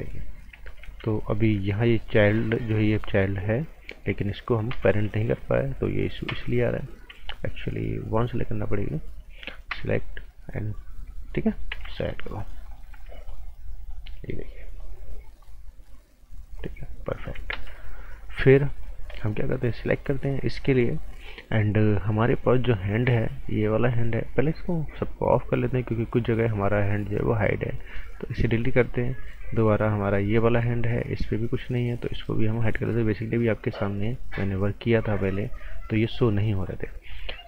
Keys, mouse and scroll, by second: 0.6 ctrl+z, 0.8 typing, 1.4 scroll up 1, 2.2 click, 4.7-5.0 typing, 6.3 typing, 8.4 click, 9.7 p, 10.7 click, 11.1 scroll down 1, 11.3 right click, 11.7 z, 12.1 right click, 12.7 click, 12.9 z, 13.3 click, 14.0 right click, 14.8 click, 17.5 ctrl+z, 18.0 scroll down 1, 18.2 right click, 18.5-19.1 scroll up 2, 18.7 right click, 19.1 right click, 19.6 click, 23.7 click, 35.9-36.3 scroll down 1, 36.3 right click.